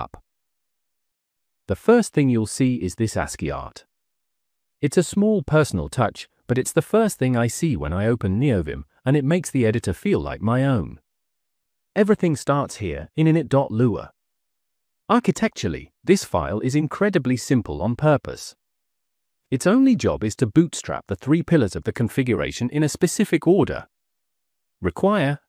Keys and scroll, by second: 9.8 -, 11.6 j, 11.8 j, 12.9 Return, 16.4 j, 17.0 j, 17.1 j, 17.1 j, 19.7 shift+v, 21.1 Escape, 21.5 l, 22.1 l, 22.2 l.